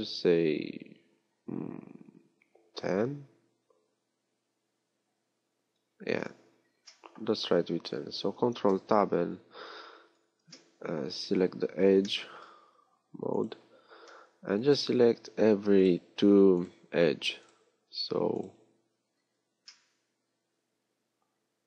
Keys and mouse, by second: 7.1-8.4 drag, 8.4 ctrl+Tab.